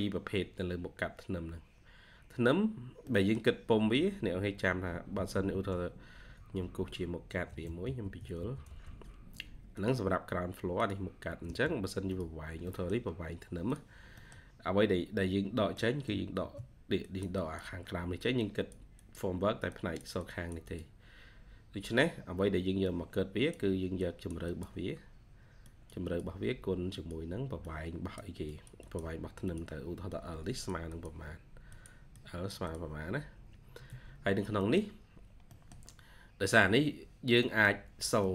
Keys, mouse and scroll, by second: 2.0-2.4 scroll up 1, 2.4-3.0 scroll down 1, 3.0 middle click, 3.3-4.1 scroll down 1, 6.5 Escape, 6.7 Escape, 7.5-8.8 typing, 9.2 scroll up 1, 10.8-11.5 typing, 11.1 double click, 12.6 middle click, 14.1 middle click, 14.3 scroll down 1, 14.5 scroll up 1, 15.5 middle click, 16.3 ctrl+q, 24.3 double click, 25.3 ctrl+q, 26.9 ctrl+q, 28.7 double click, 29.7 ctrl+q, 32.0 double click, 33.0 ctrl+q, 33.5 Escape, 33.8 Escape, 34.1-34.5 scroll down 1, 34.5 middle click, 34.7-35.2 scroll down 1, 35.4 middle click, 36.0-36.3 scroll up 1, 37.3 middle click.